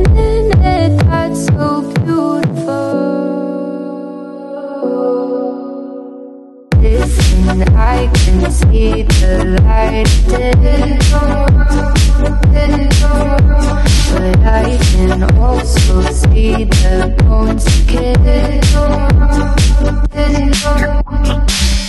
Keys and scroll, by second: 0.8 a, 1.3 d, 2.0 a, 2.9 n, 5.0-6.4 typing, 7.7 e, 7.8 Down, 8.4 Return, 11.1 super+c, 11.7 F1.